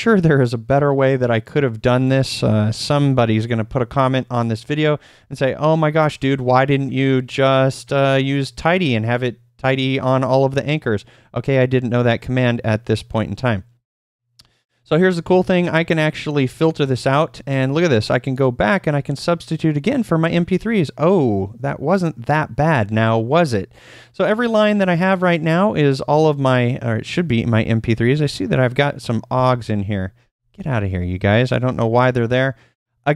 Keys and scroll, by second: 15.3 shift+;, 16.9 ctrl+p, 17.5 ctrl+p, 27.6 typing, 29.1-31.1 typing.